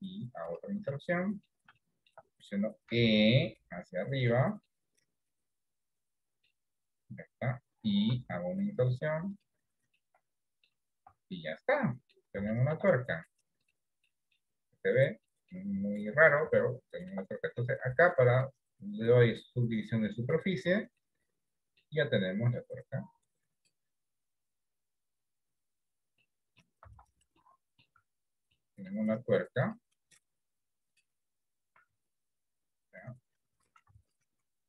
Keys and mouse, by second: 1.0 middle click, 1.9 shift+middle click, 3.2 e, 4.8-6.5 middle drag, 10.0 middle click, 10.0 i, 11.1 Tab, 11.4 middle click, 12.6 shift+middle click, 14.1 middle click, 15.4 middle click, 16.6 shift+middle click, 18.4-20.4 drag, 21.1 middle click, 25.6 click, 26.3 middle click, 27.0 Tab, 27.5 middle click, 28.1 Tab, 28.6 middle click, 29.8-31.1 drag, 31.9 Tab, 34.0 Tab.